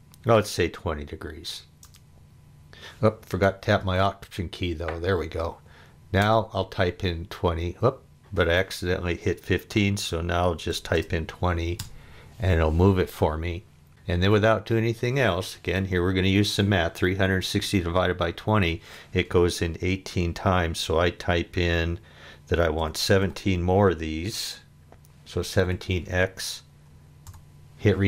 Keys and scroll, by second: 1.5 2, 1.8 0, 6.2 Return, 10.5-11.4 typing, 11.8 Return, 22.8 1, 23.2 7, 25.6 x, 27.3 Return.